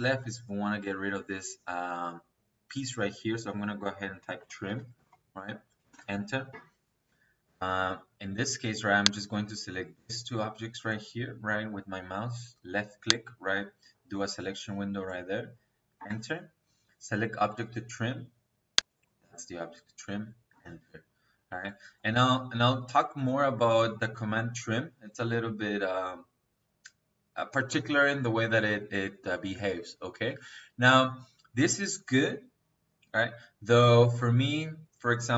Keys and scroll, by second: 3.2 Escape, 4.1-5.7 typing, 15.8 space, 20.4 space.